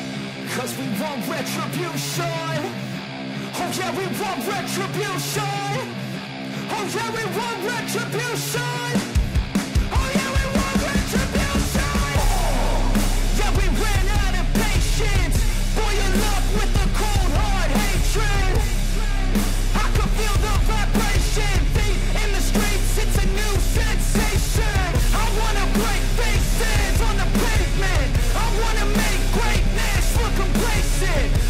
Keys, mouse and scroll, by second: 0.6-11.0 drag, 11.7 click, 17.4 click, 20.1-25.4 drag, 25.4 ctrl+-, 26.9-31.4 drag.